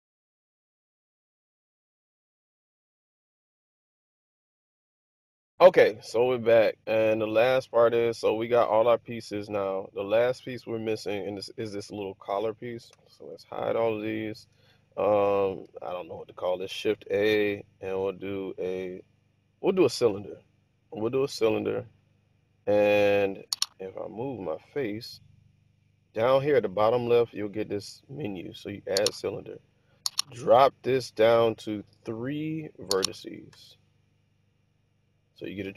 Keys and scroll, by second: 0.0-6.5 typing, 2.9 Tab, 7.7 typing, 9.0 alt+h, 13.0 h, 16.8 shift+a, 33.1 3, 33.6 Return.